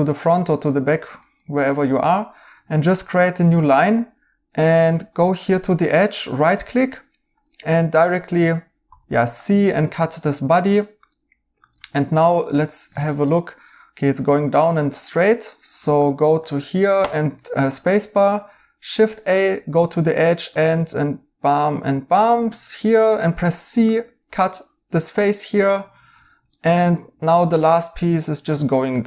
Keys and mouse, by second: 0.5 right click, 5.6 right click, 8.8 c, 11.9 right click, 15.1 right click, 15.7 Tab, 17.3 right click, 18.1 a, 22.1 right click, 23.1 c, 26.1 Tab, 26.5 right click, 28.4 right click.